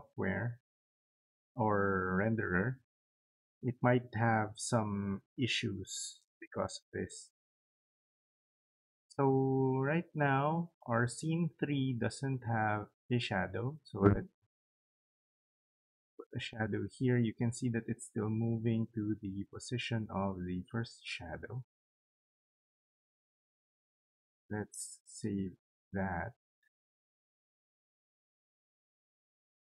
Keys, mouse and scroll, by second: 10.6 click, 21.5 click, 24.2 right click, 25.7 click, 27.1 click.